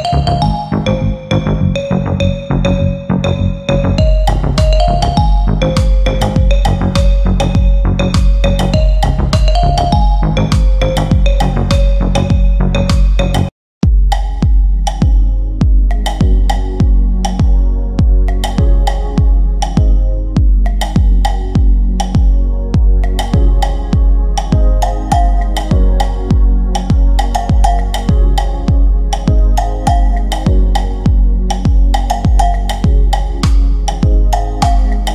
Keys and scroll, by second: 0.0 Delete, 3.6 F3, 5.7 Delete, 12.5 Escape.